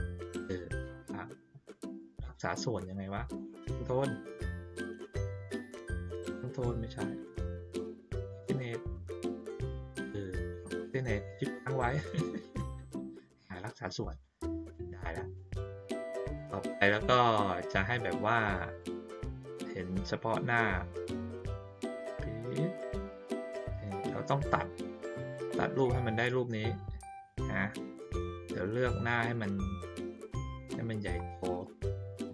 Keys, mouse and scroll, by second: 14.7-15.3 drag, 16.3-18.0 drag, 18.7-20.0 drag, 21.7-22.7 drag, 23.4-24.4 drag, 27.2 click, 30.9 ctrl+middle click, 30.9 ctrl+scroll up 1, 31.6 middle click.